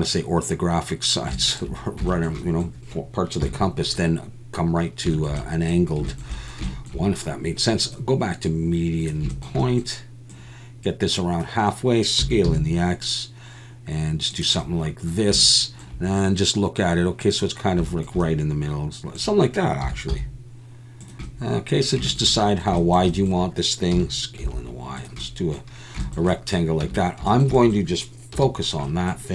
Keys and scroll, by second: 3.4 KP_1, 12.2 s, 12.4 x, 19.8 s, 20.1 z, 23.9 s, 24.4 y, 26.8 Tab, 28.3 /.